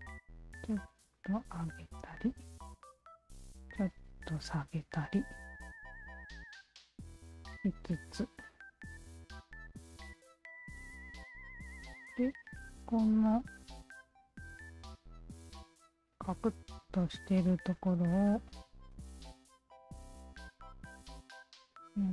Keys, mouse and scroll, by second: 1.0 alt+click, 1.7 click, 2.8 shift+v, 4.2 click, 5.0-10.0 alt+drag, 10.3 alt+click, 11.0 alt+right click, 12.1 alt+click, 13.0 w, 13.6 alt+click, 14.6 alt+click, 15.5-17.5 alt+drag, 18.4 shift+click, 19.1-20.9 alt+shift+drag, 21.6 shift+click.